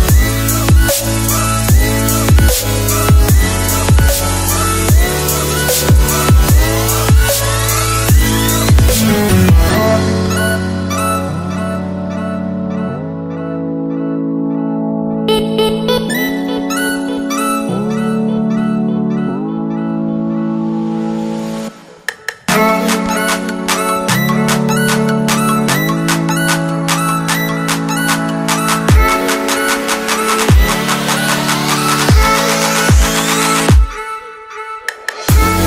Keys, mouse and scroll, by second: 11.4-12.8 scroll down 1, 12.9 scroll down 1, 14.1 scroll up 1, 15.2 scroll up 1, 15.5 click, 16.9 alt+click, 18.1 c, 18.4 Tab, 18.9 v, 19.8 click, 23.9 click, 25.0 alt+Tab, 25.6 click, 26.2 c, 27.7 click, 31.7 click, 33.5 ctrl+Num_Lock, 33.6 t, 34.1 click, 34.4 z, 34.7 click, 35.3 Return.